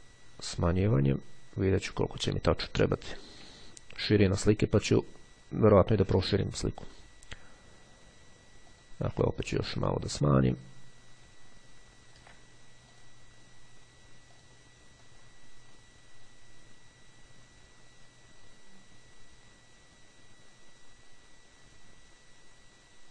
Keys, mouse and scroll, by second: 3.8-4.3 ctrl+scroll down 2, 8.7 click, 9.9-12.7 ctrl+drag, 13.0 click, 14.5 click.